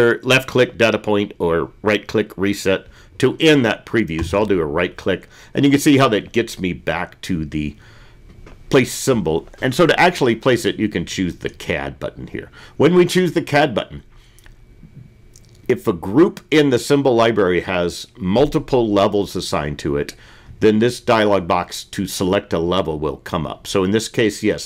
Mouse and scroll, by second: 1.0-2.8 right drag.